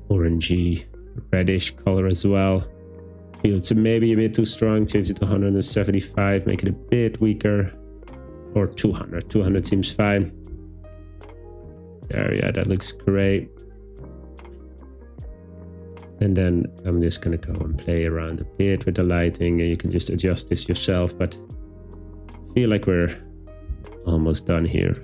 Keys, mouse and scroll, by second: 3.5-5.3 drag, 7.6 middle click, 8.7 click, 9.5 o, 17.4 g, 17.6 z, 17.8 z, 19.2 click, 22.6-23.9 middle drag, 23.2-23.7 scroll up 2, 23.7 scroll up 1, 23.7 g, 24.0 y, 24.0 middle click.